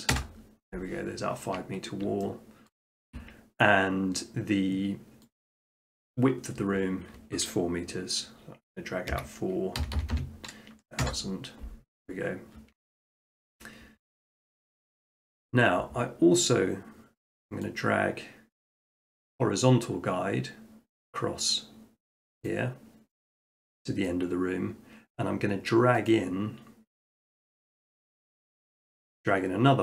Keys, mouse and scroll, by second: 0.1 Return, 2.7-4.0 shift+middle drag, 5.4-6.5 drag, 9.1-9.8 typing, 11.0 Return, 12.3 middle click, 13.4 shift+middle click, 14.6 shift+middle click, 15.0 middle click, 15.2 middle click, 17.7 click, 22.5 click, 23.5 middle click, 24.1 shift+middle click, 26.1 click, 27.4 Escape, 28.4 click.